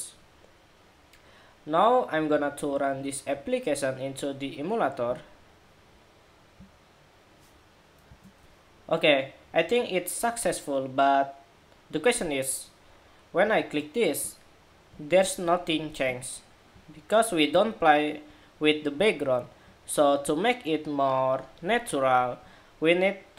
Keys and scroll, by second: 8.1 shift+super+2.